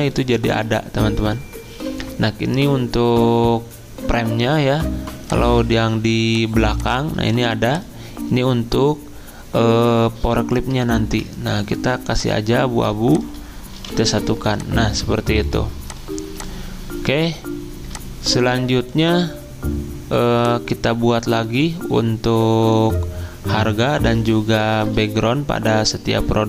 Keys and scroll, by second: 0.5 ctrl+z, 10.6 ctrl+Home, 13.7 typing.